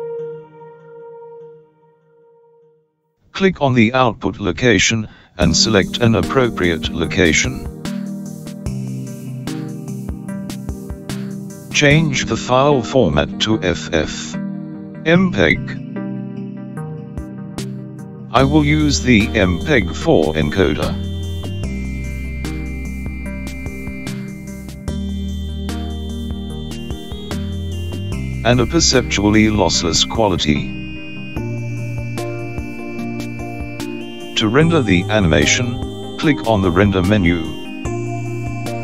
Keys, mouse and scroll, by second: 0.9 click, 3.2-4.0 scroll down 2, 4.8 click, 15.3 click, 16.4-21.4 scroll down 2, 21.4 scroll down 1, 21.6 click, 23.1 click, 26.2-26.7 scroll down 2, 26.8-28.3 scroll down 1, 28.3-29.0 scroll down 1, 29.0 click.